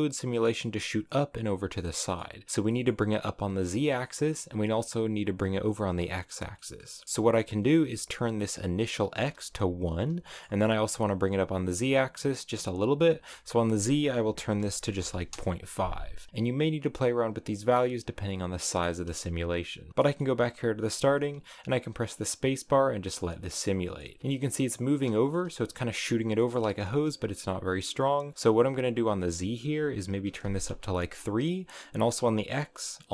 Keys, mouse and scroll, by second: 1.4 scroll down 4, 1.7 middle click, 2.4 scroll down 1, 2.6-5.5 middle drag, 5.5 scroll down 2, 5.6 middle click, 6.4 scroll up 1, 6.5 middle click, 7.2 scroll up 1, 9.0 click, 10.2-13.1 middle drag, 13.1-18.2 drag, 18.5-21.0 middle drag, 21.0 space, 23.2 middle click, 24.2 scroll up 3, 24.9 space, 25.0 shift+middle click, 25.3 scroll up 5, 26.3 middle click, 26.8-27.3 scroll down 2, 29.2-30.7 drag, 32.2-33.1 drag.